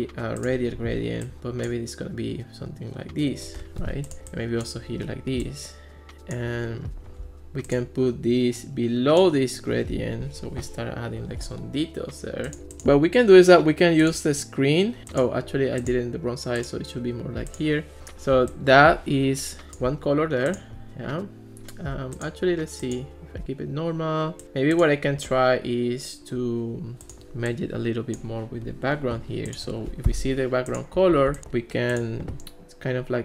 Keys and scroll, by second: 30.1 Escape, 31.2 super+c.